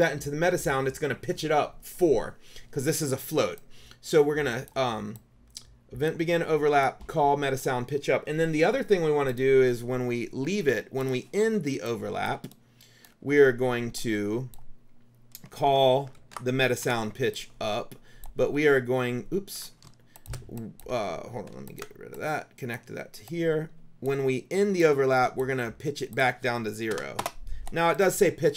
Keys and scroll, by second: 16.3 ctrl+c, 16.8 ctrl+v, 20.0 space, 27.0 KP_0, 27.3 Return.